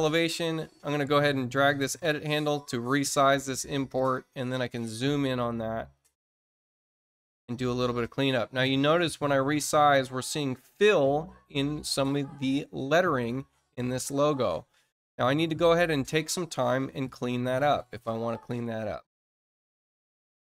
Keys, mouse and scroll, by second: 6.3 middle click, 6.8 middle click, 7.2 middle click, 8.5-12.8 drag, 16.9-18.4 ctrl+drag, 19.1 middle click.